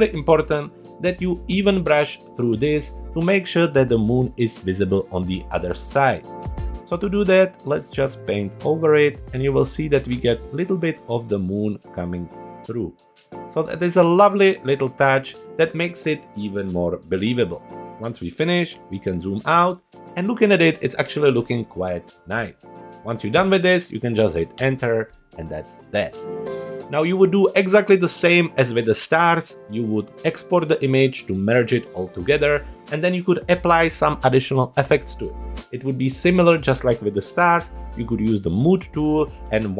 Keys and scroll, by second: 0.9 super+=, 2.3 space, 16.2 space, 18.7 super+0, 24.5 Return.